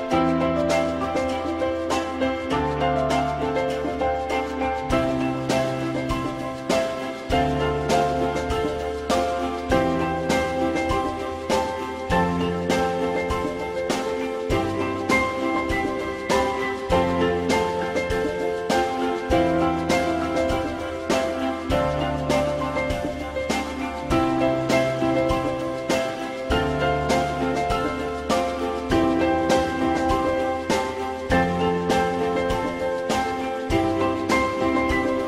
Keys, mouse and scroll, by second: 4.2 alt+click, 5.6 Delete, 8.2 click, 10.1 click, 12.1 e, 21.8 e, 24.2 ctrl+z, 25.9 ctrl+y, 28.3 ctrl+y, 30.2 click, 33.1 click, 34.4 shift+click.